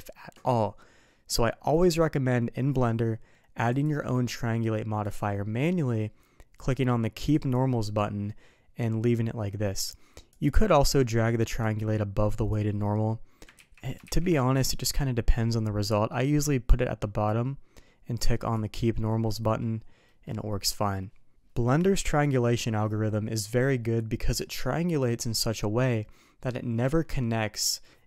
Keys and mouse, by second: 7.3 click, 10.3 click, 11.6-12.6 drag, 13.6 ctrl+z, 14.6 middle click, 16.7-17.3 ctrl+shift+drag, 18.6 click, 19.2 middle click, 20.1 middle drag, 20.7 middle drag.